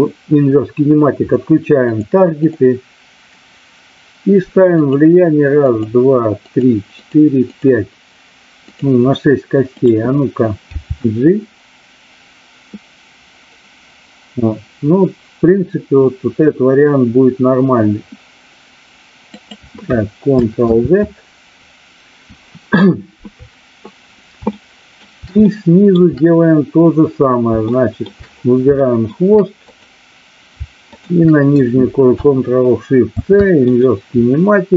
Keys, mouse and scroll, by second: 1.8 click, 2.4 click, 4.8 click, 5.5 click, 6.4 click, 6.9 click, 7.5 click, 8.6 click, 9.6 click, 10.6 g, 19.3 click, 20.5 ctrl+z, 24.4 shift+middle click, 25.4-26.0 shift+middle drag, 27.6 shift+middle drag, 28.8 shift+middle drag, 29.6 click, 30.9-31.3 shift+drag.